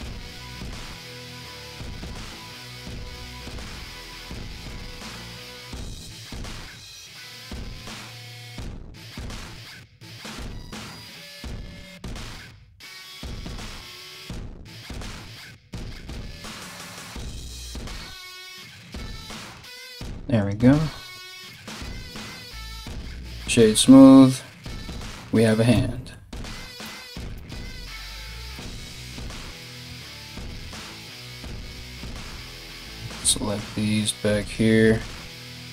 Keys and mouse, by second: 3.1 right click, 3.8 g, 6.1 1, 6.3 right click, 7.8 g, 8.7 right click, 9.0 g, 10.5 right click, 10.7 g, 12.6 right click, 12.7 g, 13.3 g, 14.2 right click, 14.4-18.2 typing, 14.9 right click, 15.8 right click, 16.6 right click, 17.3 right click, 18.0 right click, 19.2 g, 20.0 right click, 20.2 g, 21.1 Tab, 22.4 w, 25.3 Tab, 26.5 Tab, 26.9 Tab, 28.1 alt+right click, 28.2 alt+middle click, 28.8 alt+right click, 29.1-35.7 alt+middle drag, 31.3 3, 32.4 right click, 33.1 right click, 34.0 right click, 34.5 ctrl+right click, 34.9 ctrl+right click.